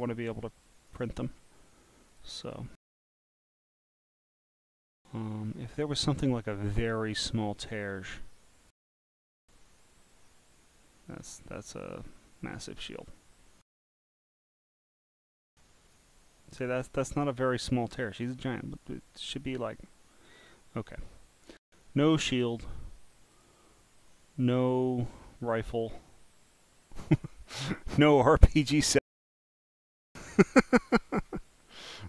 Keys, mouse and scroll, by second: 0.6 click, 1.2 scroll down 1, 1.3 scroll, 2.1 click, 2.5 scroll, 2.5 scroll, 2.6 scroll, 3.6-4.8 scroll up 13, 5.5-6.5 scroll down 4, 6.5-6.9 scroll down 1, 7.1 scroll up 4, 9.0 click, 9.7 click, 11.6 click, 12.1-13.6 scroll down 12, 13.6 scroll down 1, 14.4 scroll up 2, 15.9 click, 16.6-18.8 drag, 20.3 click, 23.3 click, 25.1 scroll down 1, 27.6 click, 29.3 click, 30.4 click.